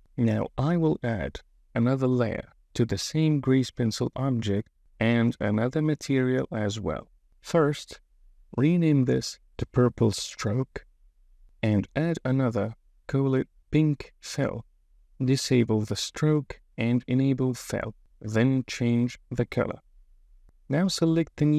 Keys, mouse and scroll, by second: 0.4 click, 5.2 click, 7.6-9.8 drag, 11.2 middle click, 11.9 click, 13.3-14.6 shift+drag, 14.4 l, 16.2 click, 17.4 click, 18.3 click, 21.2 click.